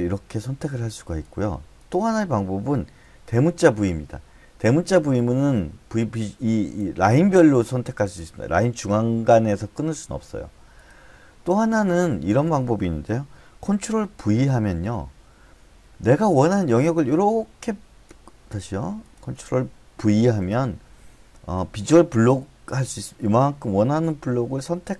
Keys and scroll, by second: 3.4 shift+v, 14.3 ctrl+v, 20.1 ctrl+v.